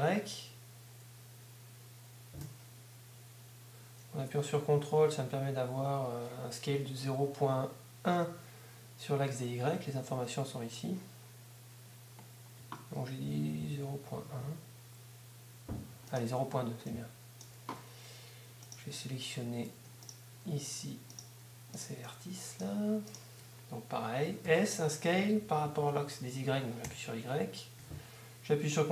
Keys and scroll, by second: 24.5 s, 26.0 s, 26.9 y, 28.0 y.